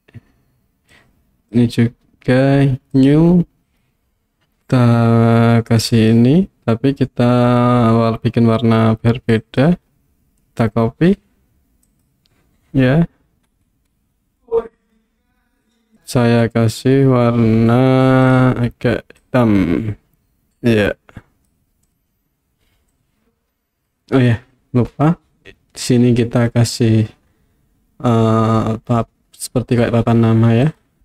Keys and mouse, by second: 1.0 click, 3.0 click, 3.7-6.2 drag, 9.3 click, 14.4-15.0 middle drag, 23.0 click, 30.8 click.